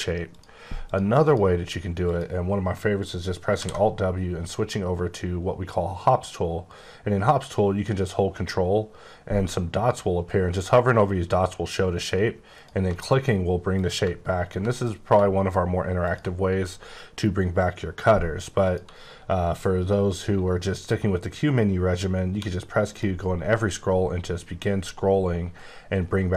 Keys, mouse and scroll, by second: 0.3 click, 0.8 click, 1.2 click, 2.0 click, 3.6 w, 12.5 click, 16.0 click, 18.6 click, 22.2 q, 22.8 click, 23.6-24.7 scroll down 4.